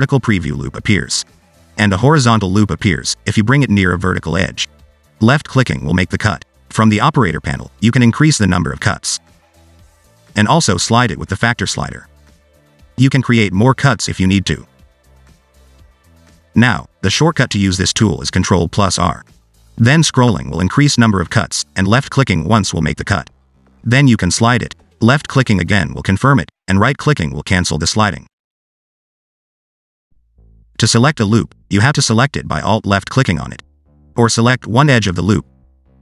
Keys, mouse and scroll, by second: 6.3 click, 8.7 click, 8.9 click, 10.4 click, 10.5 click, 11.5 click, 15.0 click, 17.6 click, 18.7 ctrl+z, 18.8 ctrl+z, 19.6 ctrl+r, 30.7 click, 31.3 middle click, 33.0 alt+click, 33.7 middle click, 34.6 2, 35.6 click.